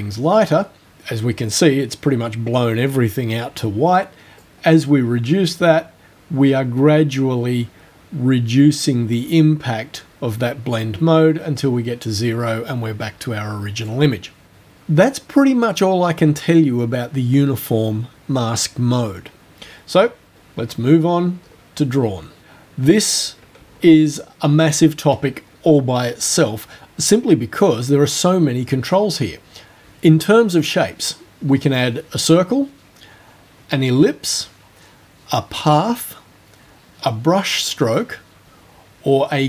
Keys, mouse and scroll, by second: 4.4-14.1 drag, 21.4 scroll up 2, 22.4 click, 23.7-24.2 ctrl+alt+scroll down 2.